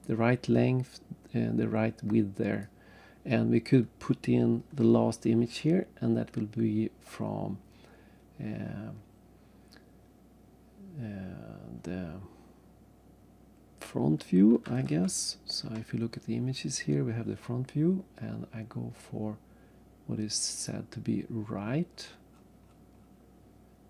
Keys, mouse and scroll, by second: 2.6 right click, 14.8 alt+Tab, 20.5 click, 21.9-22.4 scroll down 3.